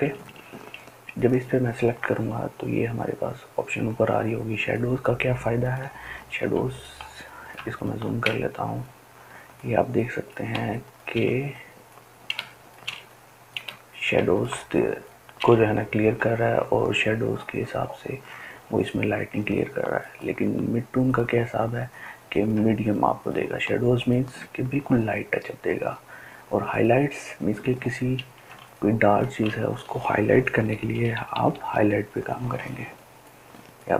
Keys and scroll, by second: 6.2 ctrl+space, 28.1 ctrl+space, 28.6 ctrl+space, 28.6 ctrl+space, 28.7 ctrl+space, 28.9 ctrl+space, 30.4-31.5 typing.